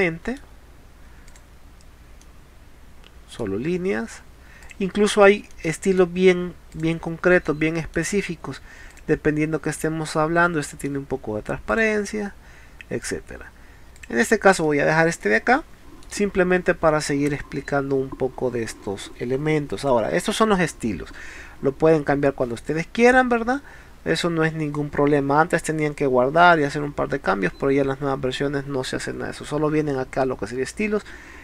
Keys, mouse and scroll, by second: 2.2-3.3 middle drag, 4.6 click, 5.5 middle click, 6.7 click, 7.4-8.0 middle drag, 8.9 click, 9.8-10.9 middle drag, 11.7 click, 13.1 click, 14.0 click, 14.7 middle click, 22.6 click, 24.2 click.